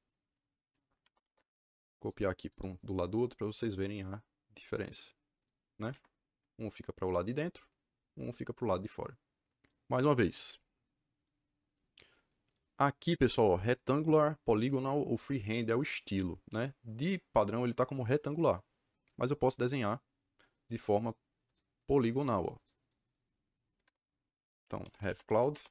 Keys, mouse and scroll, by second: 0.7-1.5 typing, 1.9 click, 2.2 click, 2.5 right click, 2.7 click, 5.3 click, 5.7 Escape, 5.8 Escape, 19.2 click, 20.9 click, 21.3 click, 21.7 click, 22.0 click, 22.7 click, 22.9 click, 23.7 KP_Enter, 24.5-25.7 typing.